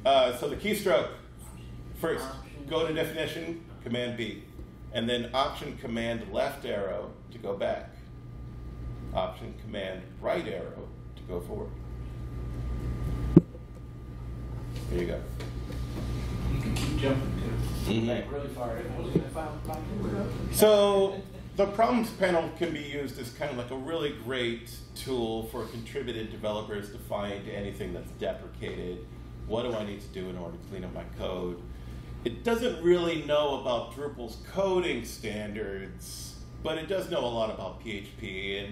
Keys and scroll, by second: 10.9 alt+super+Right, 11.5 alt+super+Left.